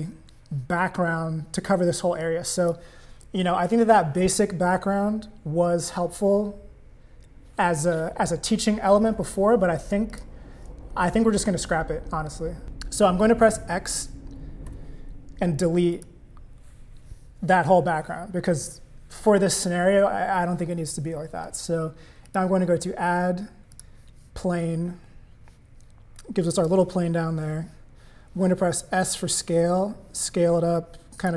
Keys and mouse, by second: 2.2 click, 10.1 click, 12.6 click, 14.7 x, 22.3-23.8 drag, 26.2 click, 28.9 s.